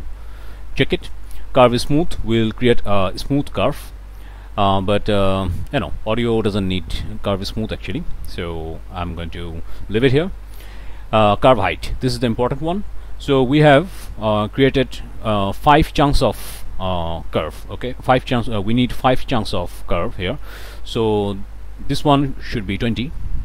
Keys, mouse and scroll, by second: 13.2 click, 13.7 click, 20.2 click.